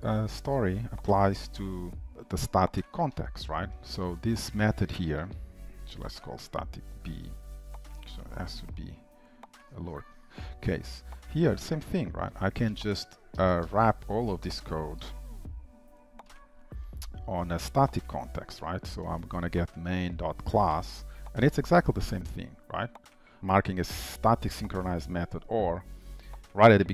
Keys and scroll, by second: 2.1 ctrl+shift+m, 2.3 ctrl+v, 9.9 Escape, 11.7 ctrl+shift+Left, 15.1 ctrl+alt+t, 20.8 Return.